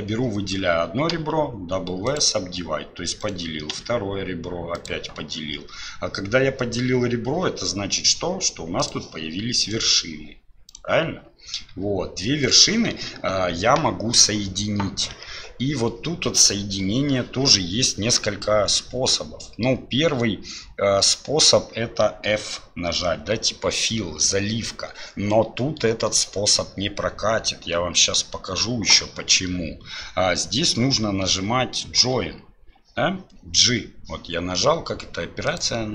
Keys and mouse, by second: 1.1 w, 3.2-4.9 drag, 8.9 click, 9.6-11.7 drag, 32.0 j, 35.5-35.9 drag.